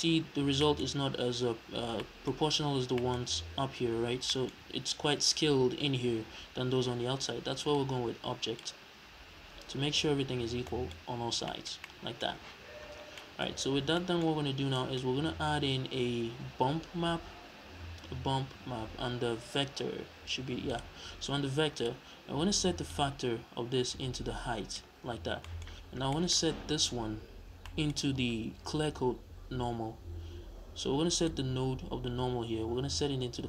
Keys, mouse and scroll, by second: 2.6-3.0 scroll down 1, 3.8-4.3 scroll up 1, 7.7 click, 10.2 scroll down 2, 10.7-21.8 middle drag, 11.0-11.5 scroll up 2, 12.7-13.2 scroll down 2, 14.5 scroll down 2, 15.1-15.5 scroll up 2, 15.5 shift+a, 21.8 click, 22.9 click, 25.1-25.4 scroll up 1, 25.4-31.3 middle drag, 25.8-27.2 scroll down 4, 27.2-27.6 scroll down 1, 31.3 click.